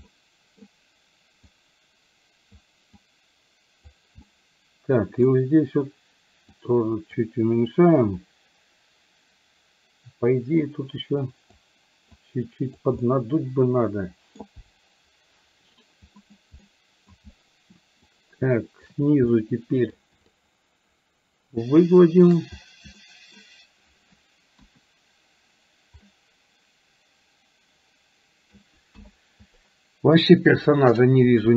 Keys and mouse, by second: 0.1 middle click, 1.5-2.6 drag, 3.1 click, 4.4 middle click, 6.6 click, 10.7-11.7 drag, 12.2 click, 13.1-14.5 middle drag, 16.7 middle click, 18.1 shift+click, 19.4 middle click, 20.4-22.5 shift+drag, 23.0 middle click, 24.6 KP_1, 26.1-27.9 middle drag, 28.0 middle click, 29.0 KP_1.